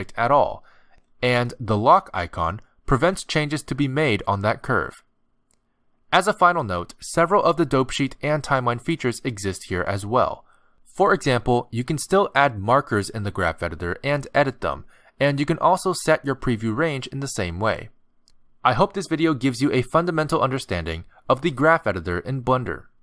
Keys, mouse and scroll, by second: 1.7 click, 3.7 click, 3.7 g, 4.9 right click, 6.0 click, 6.7 click, 8.4 click, 9.7 space, 10.6 click, 11.1 a, 12.0 click, 13.4 click, 13.6 g, 15.1 click, 18.8 click, 19.6 click.